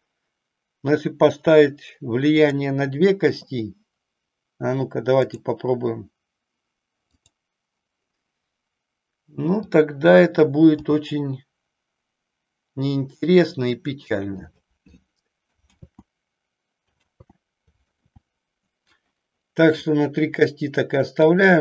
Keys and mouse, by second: 2.3 click, 5.2 click, 7.1 click, 9.6 click, 11.2 g, 14.4 click, 15.8 ctrl+z, 17.1 ctrl+z, 17.7 click, 18.1 ctrl+z, 21.1 click.